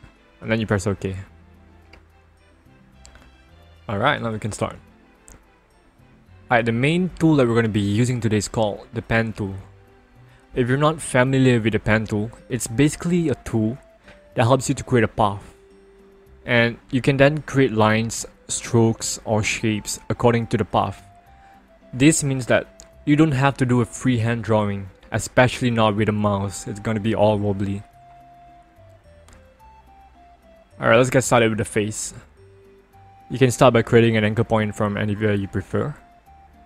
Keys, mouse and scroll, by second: 0.0 click, 2.3 ctrl+-, 4.7 ctrl+=, 6.4-9.5 scroll up 1, 12.7 click, 16.0 click, 19.0 click, 21.0 click, 22.8 click, 24.4 ctrl+click, 25.4 right click, 27.4 click, 29.6 ctrl+=, 31.2-34.2 scroll up 1, 36.3 click.